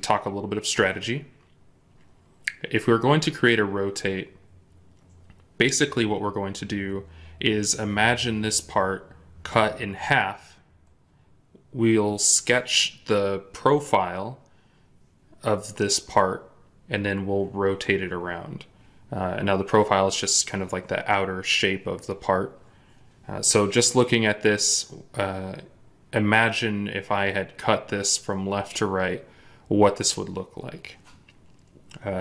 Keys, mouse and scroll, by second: 3.3-5.5 scroll down 1.